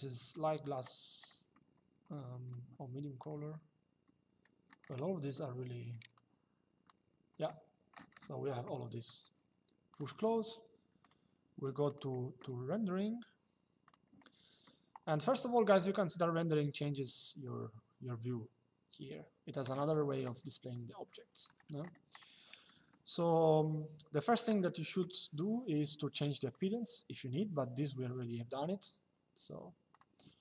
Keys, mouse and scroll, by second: 1.0 middle click, 2.2 click, 5.9 click, 7.2 middle click, 8.7 middle click, 9.6 click, 10.7 click, 13.6 click, 15.5 shift+middle click, 20.4 shift+middle click, 22.4 middle click, 26.3 click, 29.6 click.